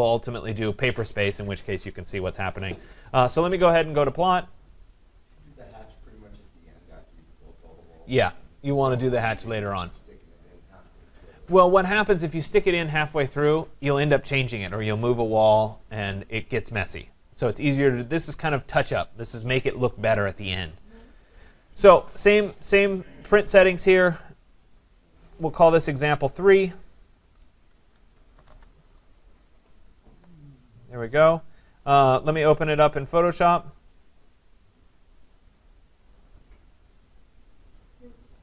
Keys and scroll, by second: 28.3 BackSpace.